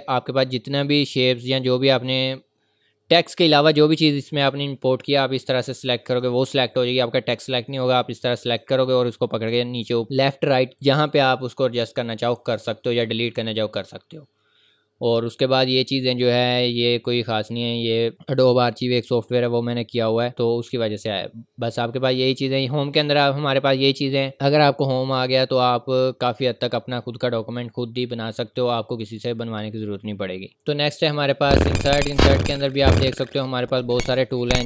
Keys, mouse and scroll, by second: 0.9-1.7 scroll up 1, 1.7-2.1 scroll down 1, 2.7-3.2 scroll up 1, 5.1 click, 9.0 click, 12.5-13.3 scroll down 1, 25.4 scroll down 1, 25.5-26.1 scroll up 1, 26.1 scroll down 1, 26.3-26.8 scroll up 1.